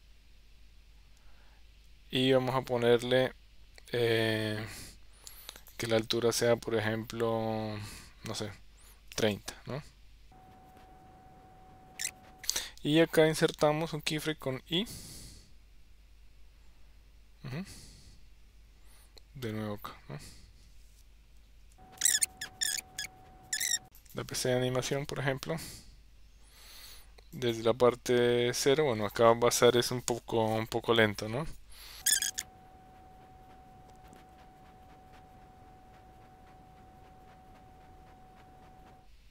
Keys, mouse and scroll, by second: 22.5 KP_0, 22.8 click, 23.1 Tab.